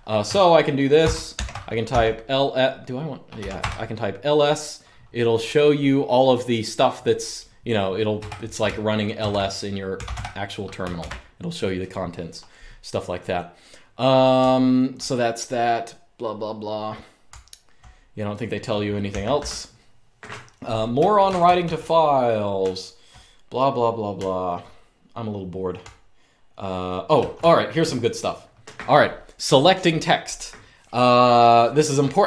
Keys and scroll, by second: 0.7-1.6 typing, 3.1 typing, 3.3 Return, 7.9 Return, 8.9 super+Return, 9.4-10.3 typing, 10.7 super+q, 14.1-14.6 typing, 17.0-17.5 typing, 18.8 z, 19.1 t, 20.7-22.8 typing, 23.9-27.5 typing.